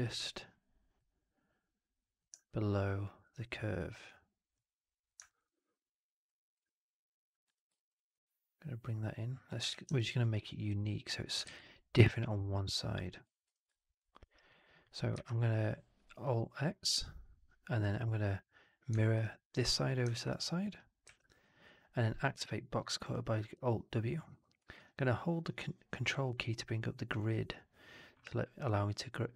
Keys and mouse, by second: 2.4-3.1 alt+drag, 4.4 middle click, 5.2 alt+right drag, 5.3-6.4 alt+drag, 7.4 3, 7.6 click, 9.6 shift+x, 9.9 alt+click, 10.6 click, 11.3 shift+x, 11.5-13.2 alt+drag, 13.4 4, 13.6 alt+drag, 14.1 alt+right drag, 14.4 alt+click, 15.0 alt+x, 17.7 click, 18.9 alt+drag, 20.0 alt+drag, 20.2 alt+click, 20.4-20.7 alt+drag, 20.9 alt+w.